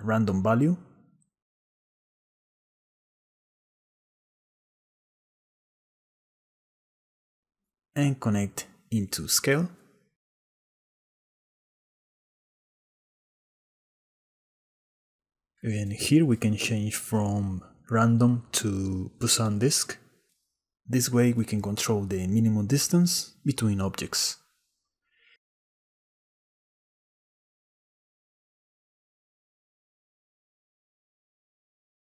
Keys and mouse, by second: 7.6-8.7 drag, 9.1 click, 10.7 shift+click, 11.5 middle click, 11.6 shift+click, 12.4 shift+click, 13.1 middle click, 13.5-14.8 shift+drag, 15.5 click, 16.0 middle click, 17.7-20.2 drag, 21.7 click, 23.9-25.0 shift+middle drag, 26.5-28.7 shift+middle drag, 30.6 shift+middle click, 30.9-32.1 shift+drag.